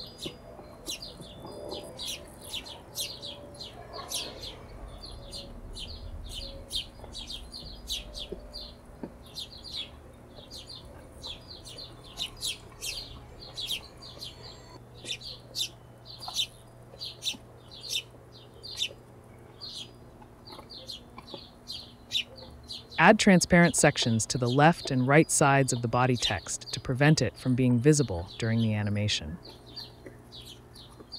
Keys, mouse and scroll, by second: 0.4 shift+a, 1.6 shift+a, 1.9 p, 2.6 shift+a, 4.9 click, 5.3 click, 6.5 click, 8.8 BackSpace, 9.7 click, 11.4 click, 12.4 click, 12.8 click, 13.7 click, 14.4 click, 14.7 click, 15.9 click, 16.3 click, 16.7 click, 18.2 click, 18.5 BackSpace, 18.5-20.1 shift+drag, 20.3 click, 21.2 shift+click, 22.2 shift+click, 24.3 shift+d, 24.6 y, 25.4 click, 26.5-28.0 drag, 28.2 click, 29.4 click, 30.7 click, 30.9 click.